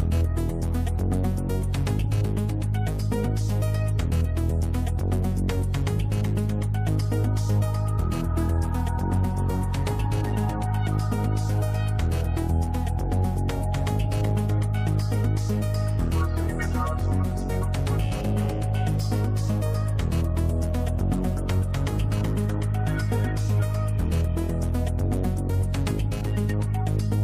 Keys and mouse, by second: 2.6 middle click, 4.3 middle click, 4.9 middle click, 6.3 middle click, 7.3-9.6 drag, 10.5 click, 10.7 click, 11.1 click, 11.2 click, 11.4 click, 11.6 click, 11.8 click, 12.2 click, 13.0 click, 14.5 click, 20.0 click, 20.6 click, 23.7 middle click, 24.7 middle click, 26.3-27.2 drag.